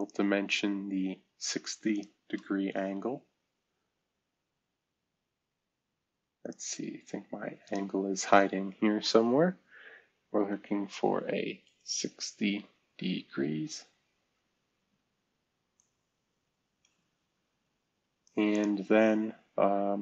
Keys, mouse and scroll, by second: 10.3-11.3 typing, 11.9 Return, 12.5 typing, 15.7-17.2 drag.